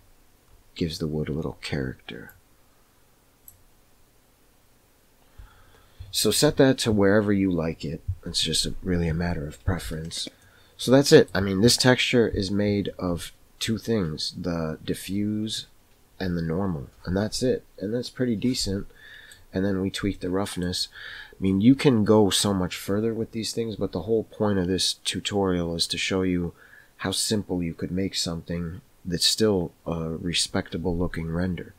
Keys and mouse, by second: 2.2-3.6 drag, 10.2 x, 10.4 middle click, 18.7 middle click, 20.1-20.6 middle drag.